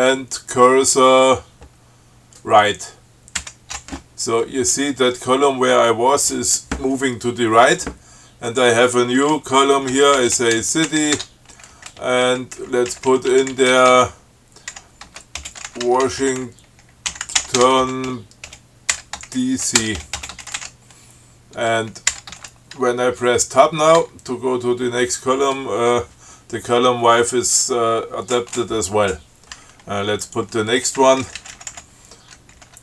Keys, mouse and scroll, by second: 3.6 alt+shift+Right, 8.7 click, 9.9-11.6 typing, 12.1 Down, 12.8 Left, 15.0-22.3 typing, 24.2 Tab, 30.5 click, 31.2 Left, 32.7-32.8 typing.